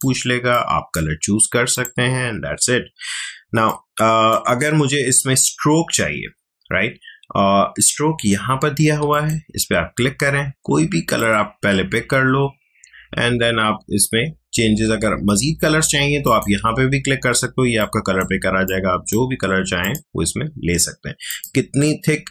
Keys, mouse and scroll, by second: 9.1 click, 16.2-22.3 drag.